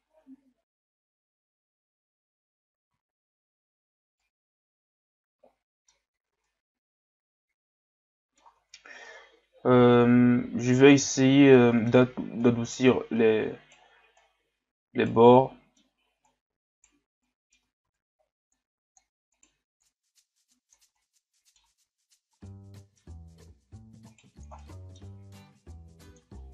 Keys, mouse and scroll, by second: 0.0-0.8 scroll down 1, 1.1-1.8 scroll up 2, 1.8 scroll up 1, 3.1-3.4 scroll down 1, 3.4-4.2 scroll up 1, 4.2-6.0 middle drag, 6.0-6.5 scroll up 2, 6.5-8.6 middle drag, 8.6 Tab, 9.1-12.4 middle drag, 12.4 right click, 14.2 right click, 15.4 middle click, 16.2 right click, 17.2 middle click, 17.9 ctrl+z, 18.6 click, 19.3 right click, 19.8-21.0 drag, 21.0 middle click, 21.9 Tab, 22.4-23.2 middle drag, 23.2 Tab, 24.1 right click, 24.6 middle click, 25.3 click, 26.4 middle click.